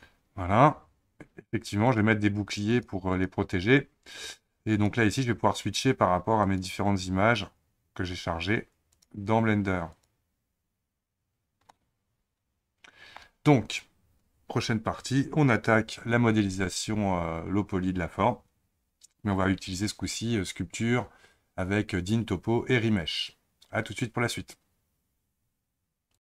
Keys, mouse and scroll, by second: 13.7-26.2 middle drag.